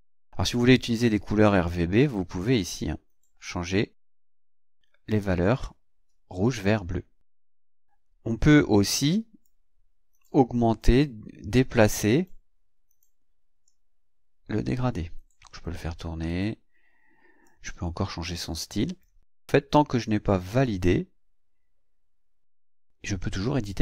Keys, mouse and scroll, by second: 2.0 click, 9.0 click, 10.2-12.2 drag, 13.7-17.6 drag, 18.9 click, 20.5-21.9 scroll down 1, 21.9 click.